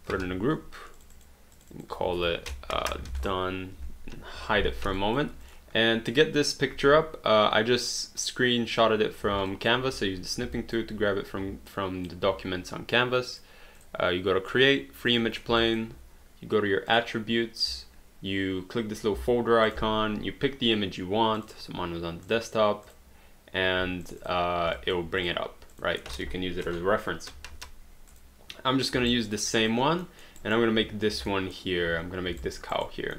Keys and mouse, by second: 0.1 ctrl+g, 1.0 click, 2.6-4.4 typing, 5.0 alt+click, 9.5 alt+click, 10.6 alt+click, 11.7 alt+click, 13.3 click, 15.1 click, 15.6 alt+click, 16.9 click, 19.7 click, 21.4 click, 24.0 click, 24.8 alt+click, 26.7 Delete, 28.1 click, 29.1 alt+right click, 30.0 alt+middle click, 30.4 alt+right click, 31.3 alt+middle click, 32.5 alt+right click.